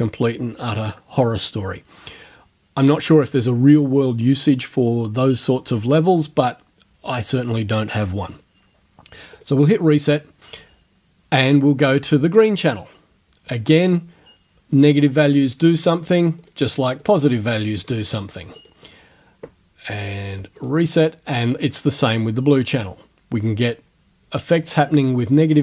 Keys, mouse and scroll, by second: 9.4 click, 12.5 click, 13.6 click, 15.5 click, 16.4 click, 17.0 click, 17.9 click, 18.6 click, 20.6 click, 21.4 click, 22.0 click, 22.6 click, 23.5-25.6 drag.